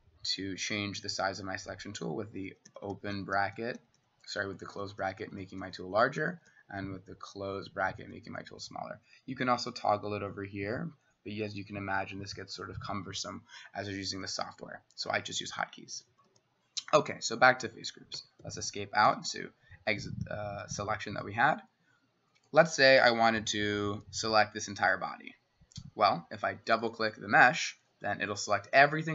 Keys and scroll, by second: 0.0 typing, 2.5-9.3 typing, 16.0 [, 16.1 [, 16.9 [, 18.2 Escape, 18.5 Escape, 19.1 s, 21.3 typing, 23.4 [, 23.9 [, 24.0 [, 25.8 typing.